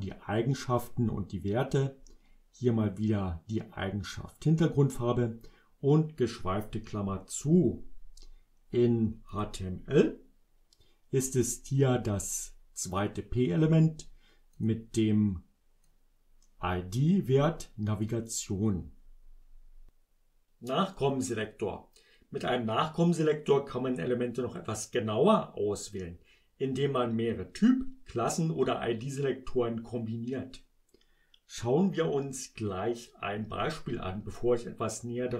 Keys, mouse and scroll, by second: 9.4 click, 14.6 click, 15.9-18.3 drag, 33.0 click.